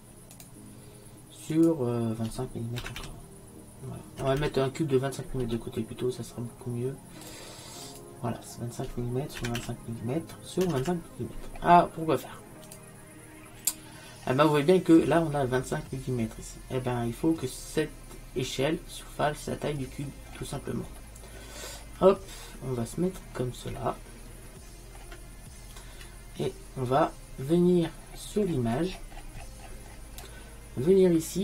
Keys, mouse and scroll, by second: 1.6-4.5 drag, 4.5 m, 7.9-9.8 drag, 10.9 m, 14.4 middle click, 16.0-19.8 middle drag, 21.3 middle click, 21.5 middle click, 21.7 middle click, 22.4 middle click, 22.9-23.9 middle drag, 27.5 middle click.